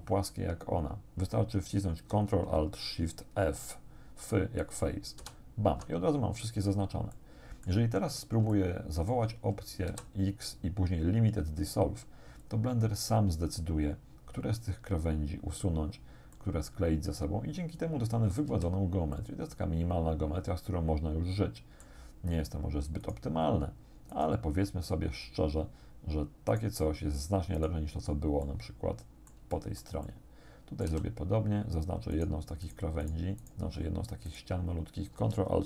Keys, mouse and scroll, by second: 5.2 ctrl+alt+shift+f, 7.2 click, 8.1 scroll down 1, 8.5 shift+middle click, 9.9 x, 12.5 click, 16.4-17.4 middle drag, 17.4-18.5 drag, 18.5 a, 19.2-22.1 drag, 23.1 right click, 24.1 right click, 26.5 right click, 27.6 right click, 28.5-30.0 middle drag, 30.2 shift+middle click, 30.9 a, 32.2 right click, 32.7 right click, 33.1 right click, 33.5 right click, 33.9-34.3 scroll up 1, 34.3 right click.